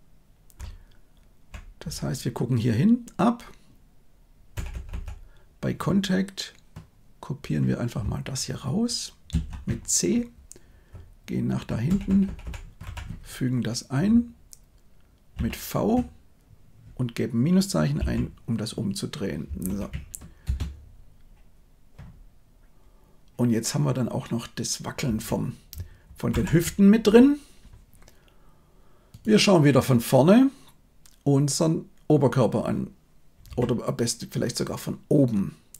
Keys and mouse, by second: 0.6-1.4 Left, 1.8 Right, 4.5 Right, 4.6 Right, 4.8 Right, 9.2 ctrl+c, 10.8-11.5 Right, 11.8 Right, 12.0 Right, 12.2 Right, 12.3 Right, 12.7 Left, 15.3 ctrl+v, 17.9 -, 19.6 shift+Left, 20.4 space, 25.0 space, 26.2 shift+Left, 33.4 KP_7.